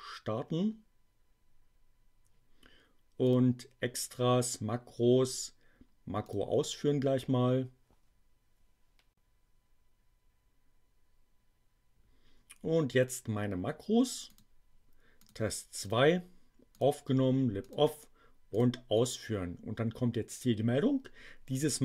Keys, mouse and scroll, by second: 3.2 click, 6.1 click, 14.3 click, 15.1 click, 15.7 click, 16.7 click, 17.6 click, 18.5 click.